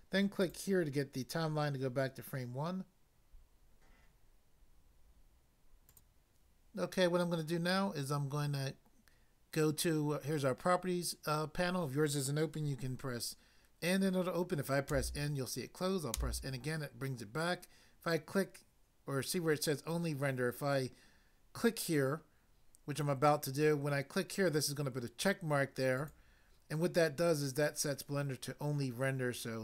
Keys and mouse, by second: 0.5 click, 5.9 click, 14.9 n, 16.2 n, 25.9 click.